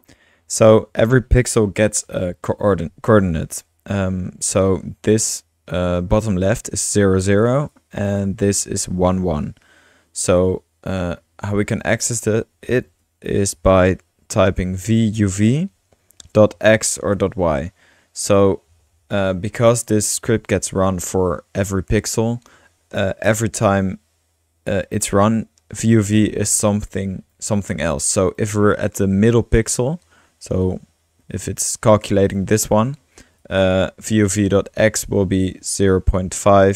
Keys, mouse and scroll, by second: 0.1-0.7 drag, 0.3-1.1 typing, 3.9 middle click, 7.7 click, 10.1-10.9 typing, 10.4-13.0 drag, 13.0 Return, 13.5 Tab, 14.4-17.2 typing, 19.1-19.9 typing, 20.1-20.4 drag, 21.7-22.6 drag, 25.7-29.8 drag, 33.4-33.7 drag, 34.2 click, 34.9-36.6 typing.